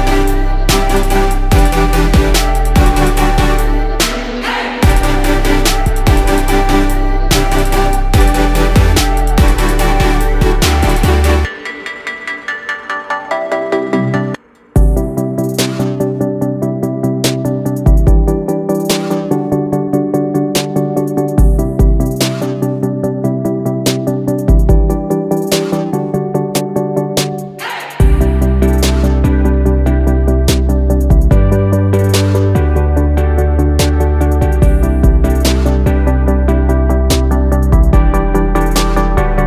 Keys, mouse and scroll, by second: 2.0-5.1 drag, 7.8 ctrl+g, 10.0 click, 15.6 ctrl+click, 16.9 ctrl+shift+g, 17.5 click, 18.7 click, 19.9 click, 20.5 shift+click, 21.3 ctrl+g, 25.6 ctrl+scroll.